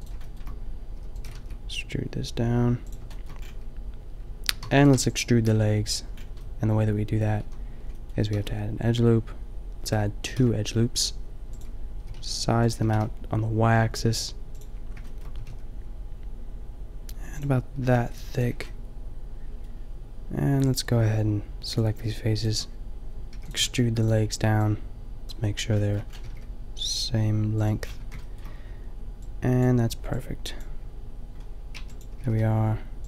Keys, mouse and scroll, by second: 0.9 e, 1.2 g, 4.6 a, 5.0 b, 7.4 a, 8.3 ctrl+r, 10.3 ctrl+r, 11.9 s, 12.8 s, 15.3 s, 17.9 s, 18.5 a, 21.7-23.2 middle drag, 23.3 e, 23.5 g, 25.2 e, 25.2 g, 26.2 g, 28.0 a, 31.7 b, 32.1 g.